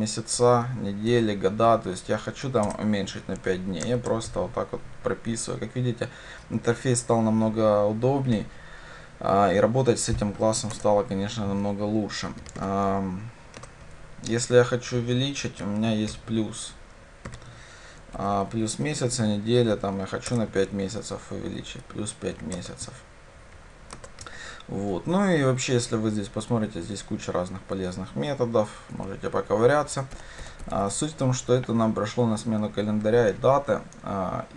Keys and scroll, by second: 2.7 Return, 13.7 Return, 20.3 Return, 31.6 Escape.